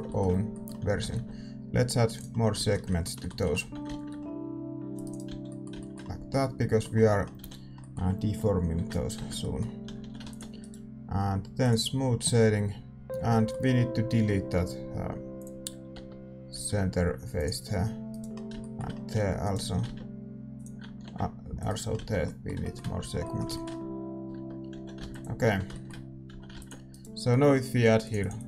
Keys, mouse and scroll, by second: 1.1 ctrl+r, 3.6 a, 3.8 ctrl+r, 5.2 a, 7.3 a, 8.7 ctrl+n, 9.1 Tab, 9.8-11.6 middle drag, 9.8 a, 9.9 a, 10.6 ctrl+s, 10.6-12.9 right drag, 11.6-19.4 drag, 12.9-15.9 middle drag, 13.1 z, 15.9 Tab, 16.5 a, 18.0-21.2 right drag, 18.3 middle click, 19.4-20.9 middle drag, 20.6 x, 20.9 ctrl+r, 21.9-28.0 middle drag, 21.9 z, 22.9 a, 24.1 Tab, 24.3 Tab, 24.7 a, 25.4 ctrl+s, 25.4 Tab, 26.2 a, 26.9 ctrl+s, 26.9-28.4 right drag, 28.0-28.4 drag.